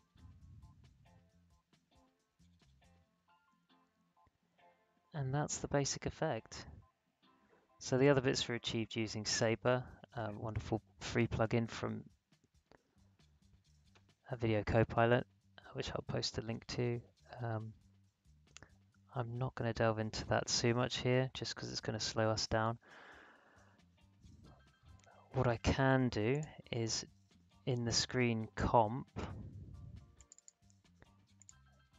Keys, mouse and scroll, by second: 22.6 space, 25.3 scroll up 1, 26.3 click, 30.1 click.